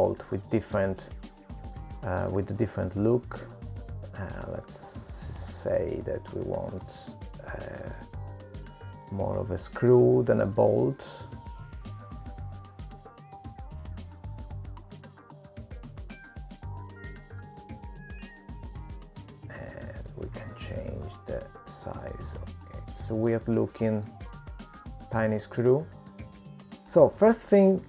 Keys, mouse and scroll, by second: 2.4 click, 3.2 BackSpace, 3.6 Delete, 4.4 click, 9.2 click, 12.9 click, 18.9 click, 23.9 click, 24.3 middle click, 25.9 shift+middle click, 26.1 click, 26.5 g.